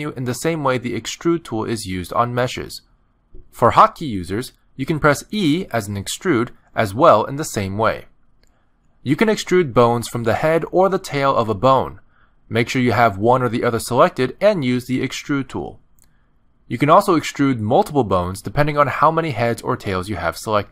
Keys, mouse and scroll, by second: 0.8 ctrl+z, 2.3 click, 3.5 click, 4.5 middle click, 5.7 click, 9.1 middle click, 11.0 shift+middle click, 11.6-12.1 scroll up 1, 13.2 click, 13.7 middle click, 15.1 click, 17.9 ctrl+z, 18.4 middle click, 20.0 click.